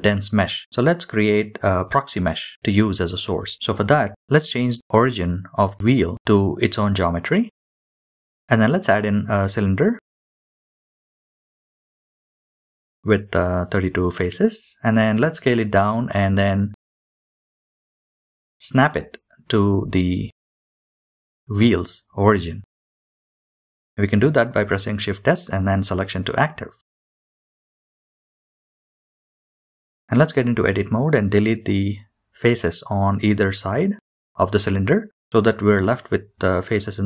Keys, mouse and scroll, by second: 0.4-0.7 shift+middle drag, 1.8-5.9 drag, 9.0 shift+a, 14.4-14.8 scroll down 8, 15.4 scroll down 1, 15.4 KP_Decimal, 16.7 click, 16.7 Escape, 17.9 middle drag, 18.2 middle drag, 18.5 KP_3, 18.5 KP_1, 19.1-19.7 scroll down 12, 19.5 g, 19.8-20.3 scroll up 7, 19.8 shift+middle click, 20.0 shift+middle click, 20.1 shift+middle click, 20.3 shift+middle click, 20.4 s, 21.1 click, 23.3 shift+click, 25.5 shift+s, 29.1 shift+middle click, 29.7 scroll down 2, 30.0-31.2 drag, 31.8 click, 32.3 x, 33.8 click, 34.8 x, 36.3-37.0 middle drag.